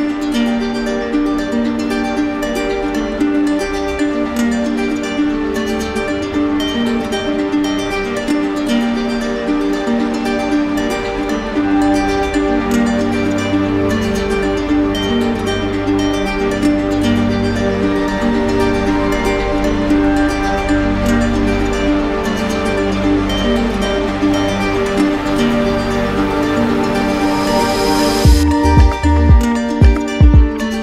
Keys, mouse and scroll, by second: 0.9 shift+click, 1.5 shift+click, 1.9 shift+click, 2.7 right click, 3.6 alt+right click, 4.5 shift+click, 4.8 shift+click, 5.5 right click, 6.5 shift+click, 8.1 shift+click, 11.1 right click, 11.4 shift+right click, 12.6 right click, 13.6 right click, 14.1 shift+right click, 14.2 shift+right click, 14.4 d, 16.9 click, 17.3 shift+click, 22.0 shift+click, 22.6 right click, 23.6 click, 25.9 right click, 28.1 click, 30.7 click.